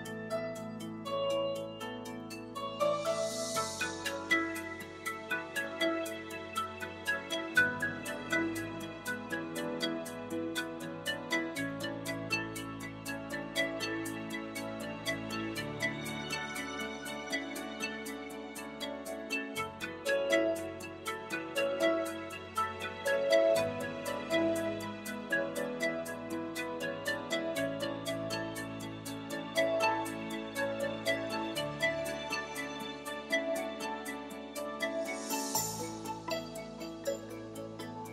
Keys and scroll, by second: 20.8 r, 28.0 t.